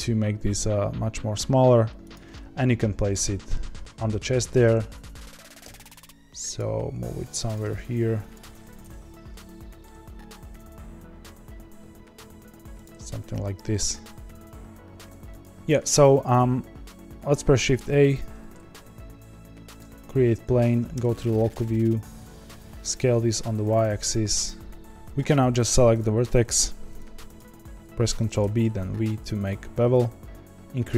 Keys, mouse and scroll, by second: 2.3-4.8 middle drag, 4.8 KP_3, 5.6 g, 6.6 r, 7.6 g, 8.8 KP_1, 9.8-10.3 middle drag, 10.3 r, 12.9 s, 19.7 shift+a, 20.9 KP_Divide, 21.5 Tab, 21.9 s, 24.8-25.9 middle drag, 25.9 click, 26.9 click, 28.1 ctrl+b.